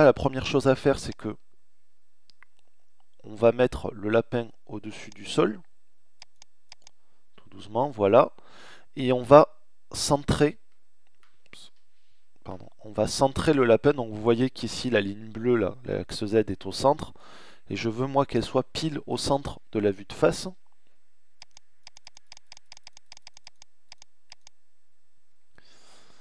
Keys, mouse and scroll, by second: 7.5-10.6 middle drag, 10.6 KP_1, 13.8 middle click, 14.0 middle click, 20.3 middle click, 24.8-26.2 scroll up 1.